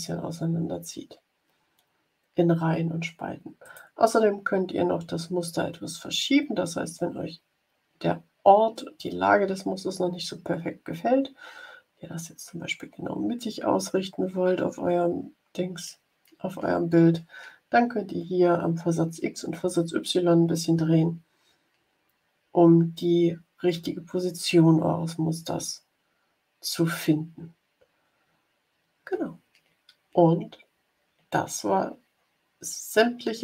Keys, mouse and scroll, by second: 3.5 click, 5.5-6.1 scroll up 4, 6.2-6.7 scroll down 2, 6.9-9.2 scroll down 9, 9.6-10.2 scroll down 3, 13.0 scroll down 2, 15.2 scroll up 2, 17.9-19.2 drag.